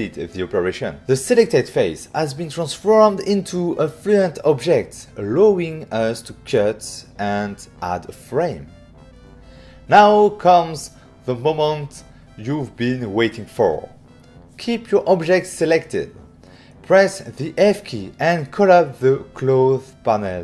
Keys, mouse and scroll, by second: 3.5 click, 4.7 click, 6.2 click, 9.9 click, 10.8 click, 11.6 click, 12.0 middle click, 13.1 right click, 13.4 middle click, 15.3 f, 18.7 click.